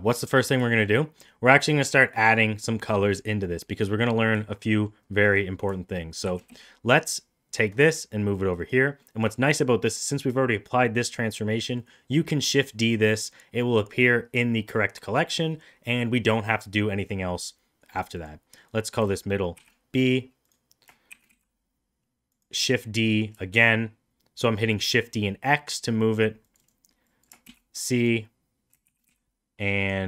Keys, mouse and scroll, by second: 0.2 middle click, 0.7 shift+middle drag, 0.9 middle drag, 3.5 middle drag, 4.0 middle drag, 4.4 shift+middle drag, 4.7 middle click, 6.3 shift+d, 9.0 middle drag, 11.6 middle drag, 18.0 click, 18.1-20.0 drag, 21.1 shift+d, 22.7 middle click, 22.8 middle click, 23.1 middle click, 23.4 shift+middle click, 26.6-28.0 drag, 28.9 shift+d.